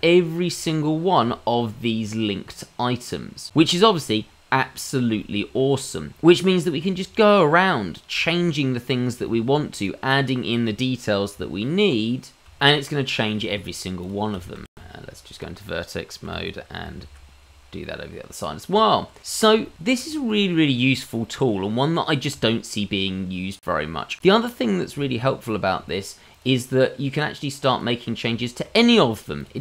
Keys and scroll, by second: 7.9 Tab, 8.5 g, 8.9 ctrl+z, 9.2 Tab, 9.9 i, 10.9 e, 11.4 Tab, 12.1 ctrl+x, 12.3 Tab, 14.8 Tab, 16.2 a, 16.9 alt+x, 18.7 Tab.